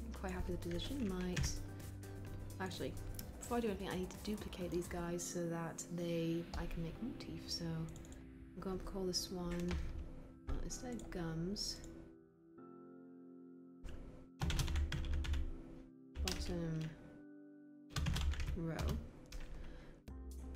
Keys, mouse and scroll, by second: 1.3 e.